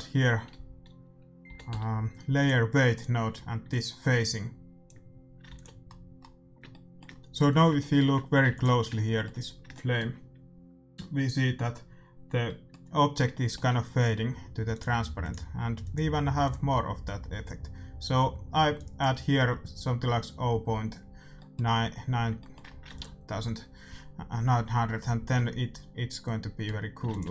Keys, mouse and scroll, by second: 3.6-5.5 drag, 5.5 ctrl+s, 5.8-11.5 middle drag, 8.4 ctrl+s, 12.4-15.7 middle drag, 14.7-18.2 drag, 18.7-20.6 drag, 21.3-25.0 middle drag, 23.0 ctrl+s, 25.3 middle click, 26.3 middle click, 27.1 ctrl+s, 27.1-27.3 drag.